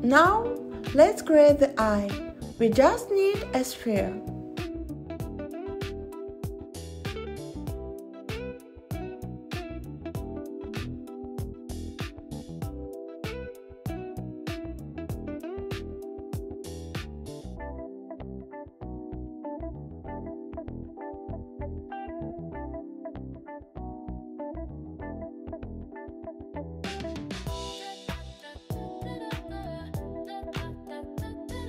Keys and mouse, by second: 3.6 r, 4.5 y, 5.6 9, 5.7 0, 6.8 click, 8.7 s, 9.8 click, 10.6 click, 13.5-15.7 drag, 17.5 click, 17.9 click, 20.9-22.0 drag, 24.6 click, 25.0-26.2 drag, 29.3 Tab, 30.4 click.